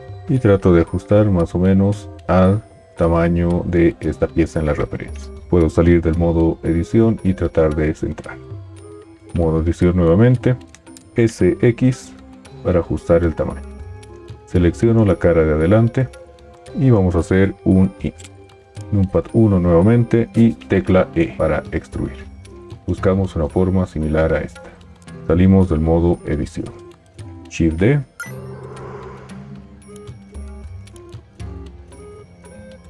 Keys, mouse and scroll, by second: 5.5 Tab, 7.6 g, 9.3 Tab, 11.1 s, 17.9 i, 18.9 KP_1, 21.0 e, 25.7 Tab, 27.5 shift+d.